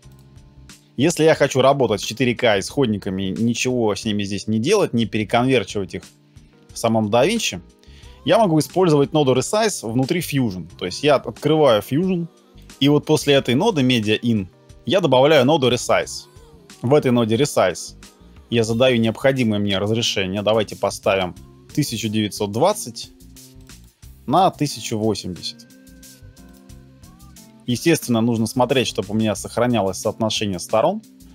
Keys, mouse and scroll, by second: 12.7 middle click, 14.7 scroll down 1, 16.0 shift+space, 21.6 double click, 23.8 double click, 26.3 typing, 27.4 scroll down 17, 27.7 scroll up 1.